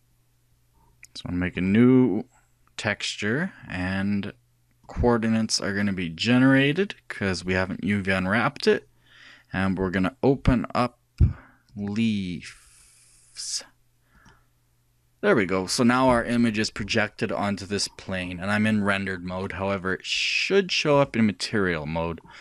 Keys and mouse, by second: 2.0-3.7 drag, 5.6-7.2 drag, 10.9-13.7 drag, 20.0 click.